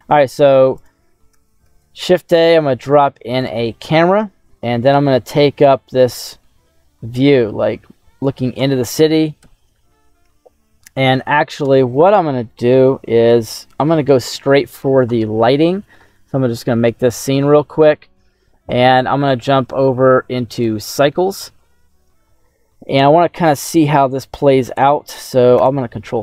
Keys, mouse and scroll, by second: 0.0 middle click, 0.0-0.7 scroll down 2, 0.7 click, 1.6 shift+a, 3.8 scroll down 1, 4.2 scroll up 2, 4.6-5.7 middle drag, 6.4-8.2 ctrl+middle drag, 9.3 ctrl+alt+KP_0, 10.8-12.4 right drag, 21.0 click, 25.5 ctrl+space.